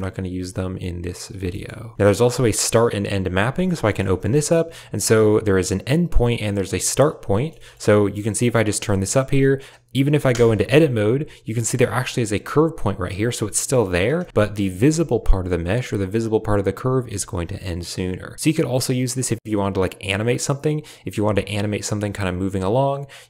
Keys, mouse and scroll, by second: 1.1 click, 1.4 shift+drag, 1.8 shift+click, 3.8 middle click, 4.0 shift+middle click, 5.0-6.2 drag, 6.7 click, 7.3 shift+drag, 7.5 shift+click, 8.4-9.5 drag, 10.2 Tab, 11.5 click, 11.8 g, 14.1 Tab, 14.8 Tab, 16.9 Tab, 17.8-22.5 drag, 23.0-23.2 drag.